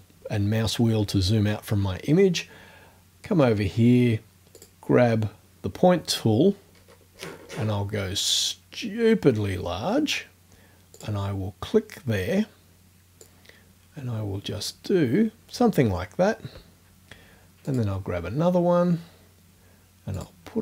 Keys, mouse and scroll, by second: 4.6 click, 6.8-7.1 scroll up 1, 7.2-7.9 scroll down 2, 11.0 click, 13.2-14.9 drag, 17.7 click, 20.2 click.